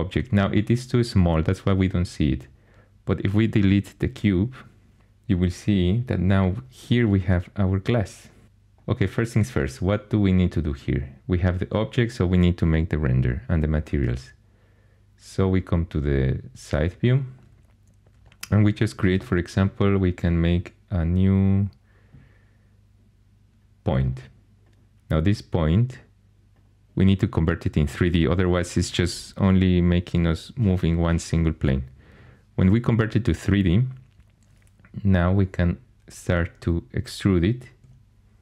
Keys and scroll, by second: 4.2 Delete, 19.1 shift+a, 37.8 e.